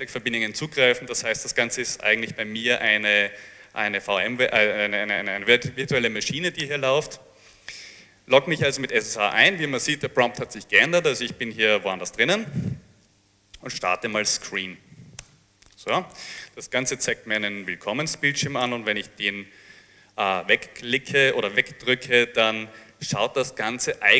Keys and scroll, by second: 1.2-2.8 typing, 2.8 Up, 6.8 Return, 13.6-15.2 typing, 15.2 Return, 18.7 Return.